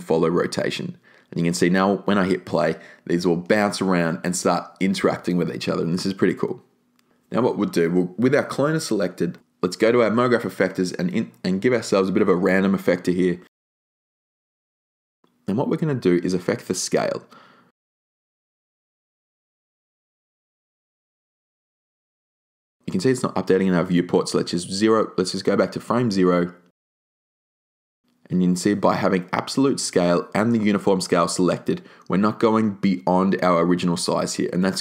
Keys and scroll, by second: 0.0-0.9 typing, 1.1 Return.